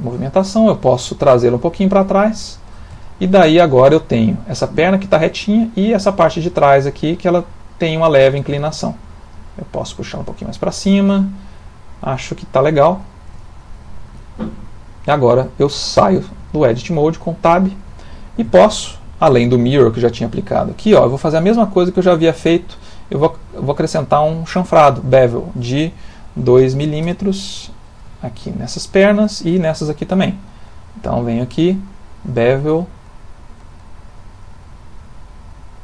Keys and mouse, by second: 0.4 middle click, 1.5 click, 3.0 ctrl+middle click, 3.4 shift+middle click, 3.9 middle click, 5.7 click, 8.6 shift+middle click, 8.7 shift+middle click, 9.3 click, 10.9 middle click, 11.0 middle click, 12.8 middle click, 13.0 ctrl+middle click, 13.2 ctrl+middle click, 16.0 Tab, 16.5 ctrl+middle click, 17.0 middle click, 18.0 ctrl+middle click, 18.8 middle click, 19.8 click, 21.2 click, 21.7 click, 25.4 click, 26.7 m, 28.1 ctrl+middle click, 29.1 click, 30.4 click, 34.4 click, 35.4 click.